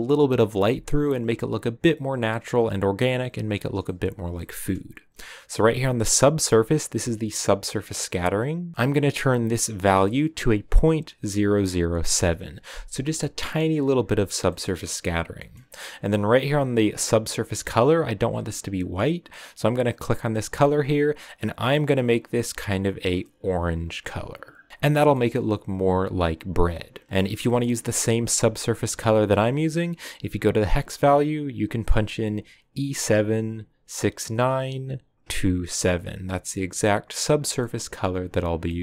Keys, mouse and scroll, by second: 20.9 click, 21.7 click, 24.7 ctrl+v, 25.0-35.9 middle drag, 37.5-38.8 middle drag.